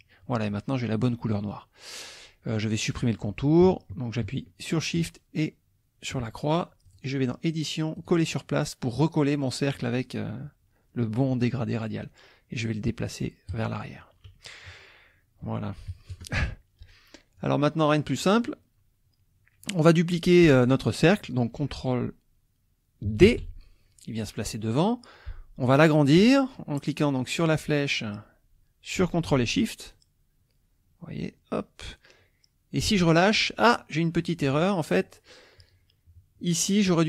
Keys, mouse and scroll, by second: 5.0 shift+click, 6.8 click, 8.0 click, 9.7 click, 13.5 click, 14.7 -, 15.4 KP_Subtract, 15.9 KP_Add, 17.4 click, 23.2 ctrl+d, 25.6 click, 27.4-33.0 drag.